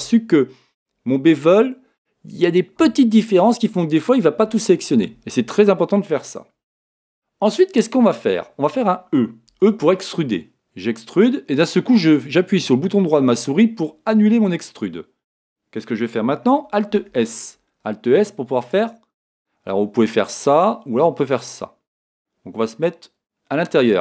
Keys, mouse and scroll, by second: 9.6 e, 17.1 alt+s.